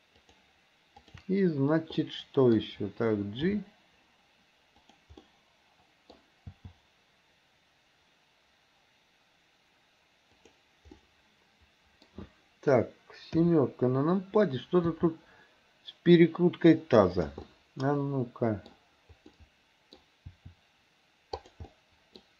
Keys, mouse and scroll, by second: 0.2 shift+click, 1.0 shift+click, 2.1-2.6 middle drag, 3.5 g, 5.3 middle click, 6.6 g, 11.0-12.2 middle drag, 13.4 KP_7, 15.0 r, 17.5-18.7 middle drag, 19.4 middle click, 20.3 r, 21.8 middle click.